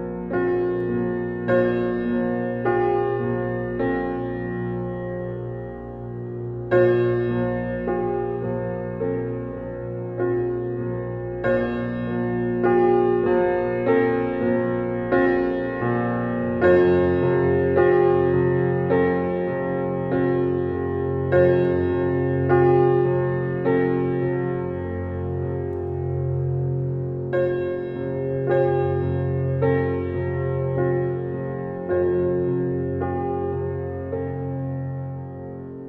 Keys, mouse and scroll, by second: 0.2-3.1 middle drag, 3.1 scroll down 1, 3.3-3.7 shift+middle drag, 3.7-4.3 scroll down 1, 4.3 click, 4.9-6.4 drag, 8.5-9.1 drag, 9.2-9.8 drag, 9.8 scroll up 3, 10.0-10.4 scroll down 2, 10.4-13.6 shift+middle drag, 14.0 Tab, 14.8 alt+click, 15.2 alt+click, 16.1 click, 16.6 click, 16.9 Tab, 17.2-17.5 scroll down 4, 17.5-17.9 middle drag, 17.9 click, 18.1-18.9 scroll down 4, 18.9-20.8 middle drag, 20.8 click, 21.2 click, 21.9-22.4 scroll down 1, 22.4-23.8 middle drag, 25.0 click, 25.3-25.9 scroll up 4, 25.9-27.1 shift+middle drag, 27.1 click, 27.6 shift+click, 28.1-28.7 shift+middle drag, 28.7 shift+click, 29.5 g, 31.5 click, 31.7 scroll down 3, 32.0-33.4 middle drag, 33.4 click, 33.6 scroll down 2, 33.8-34.6 middle drag, 34.6 click, 35.5-35.8 middle drag.